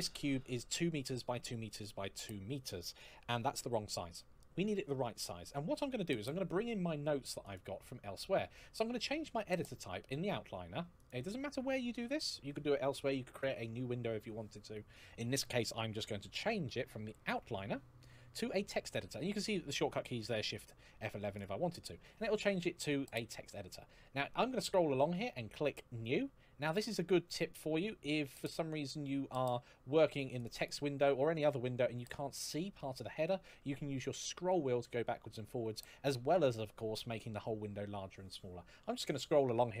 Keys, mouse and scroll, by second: 7.2 click, 10.7 click, 21.1 click, 23.8-25.5 scroll down 1, 26.1-26.6 scroll down 1, 26.6-27.4 scroll up 1, 27.4-28.2 scroll down 1, 28.2-29.8 scroll up 1, 30.1 click, 30.8 scroll down 1, 33.0-34.0 scroll down 1, 34.0-34.8 scroll up 1, 34.8-35.5 scroll down 1, 35.6-36.1 scroll up 1, 38.2-39.8 scroll down 1.